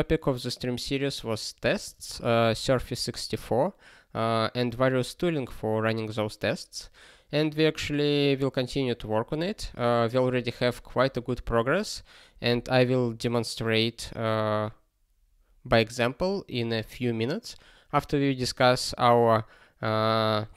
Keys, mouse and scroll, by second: 1.8 click, 2.5 ctrl+k, 3.0 ctrl+s.